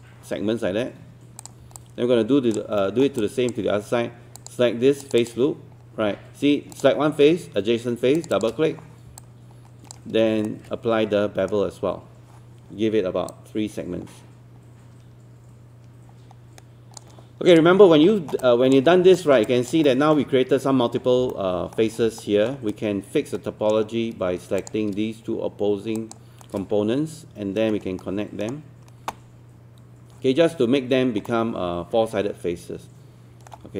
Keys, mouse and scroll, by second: 1.8 alt+click, 2.8 alt+middle click, 3.2 alt+click, 4.4 click, 5.0 shift+click, 8.2 shift+click, 8.3 shift+click, 9.2 alt+click, 10.5-12.4 shift+right drag, 13.3-17.4 drag, 17.9 scroll up 2, 18.1 alt+middle click, 18.9 scroll up 1, 19.2 alt+middle click, 19.5 click, 19.9 alt+middle click, 21.0 scroll up 1, 21.3 alt+middle click, 22.2 alt+middle click, 22.7-24.4 right drag, 24.6 click, 25.9 shift+click, 26.4-29.4 shift+right drag, 31.3-33.5 alt+middle drag.